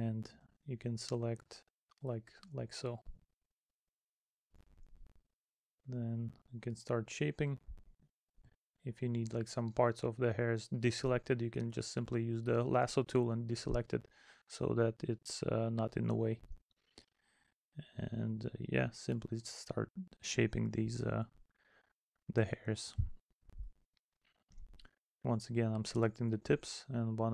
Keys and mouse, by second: 0.3 middle click, 1.3 middle click, 3.6 middle click, 4.9 middle click, 6.1 middle click, 7.2 middle click, 8.1 middle click, 9.1 middle click, 9.7 middle click, 11.9 middle click, 13.5 middle click, 14.1 middle click, 16.6 middle click, 17.4 middle click, 24.0 middle click.